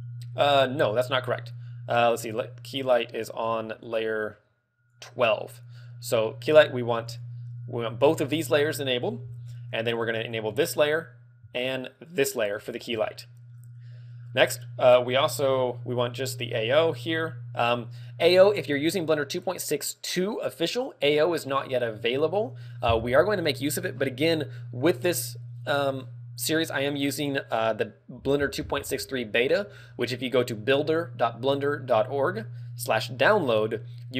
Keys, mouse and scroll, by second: 2.8 click, 3.3-4.2 scroll down 5, 3.8 right click, 4.9 click, 4.9 scroll down 1, 7.6 shift+click, 10.4 click, 12.2 shift+click, 13.0 shift+middle click, 14.2-14.6 scroll down 3.